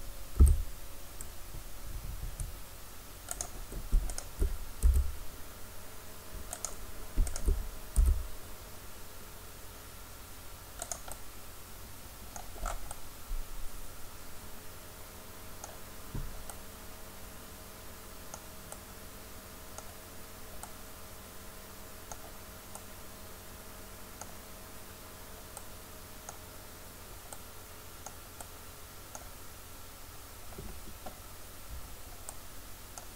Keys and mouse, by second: 0.4 s, 3.4 click, 4.9 s, 8.0 s, 11.1-12.2 drag, 12.3 click, 16.8-18.3 middle drag, 18.8 middle click, 21.5-25.8 middle drag, 26.6-31.9 middle drag, 32.3 middle click, 33.0 middle click.